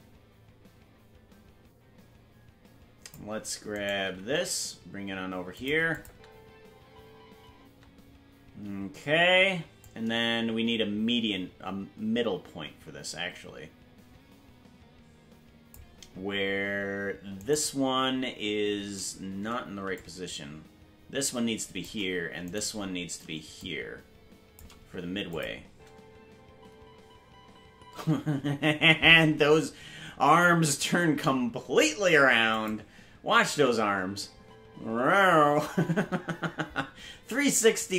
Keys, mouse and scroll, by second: 5.9 click, 6.1 space, 8.8 space, 9.8-15.7 drag, 19.9-21.8 shift+drag, 22.5 right click, 23.5-24.6 shift+drag, 25.3 click, 25.6 space, 32.5 click, 33.4 space.